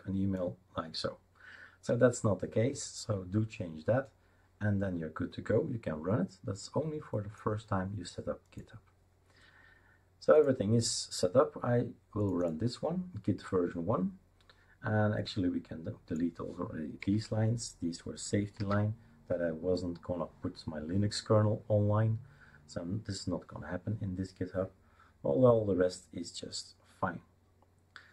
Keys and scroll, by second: 17.0 Delete, 17.9 Delete, 18.6 ctrl+s.